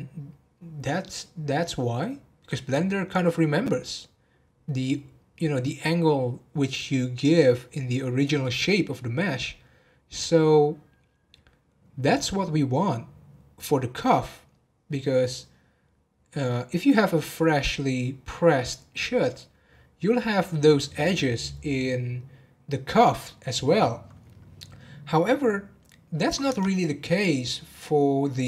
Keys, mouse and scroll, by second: 26.5 Tab.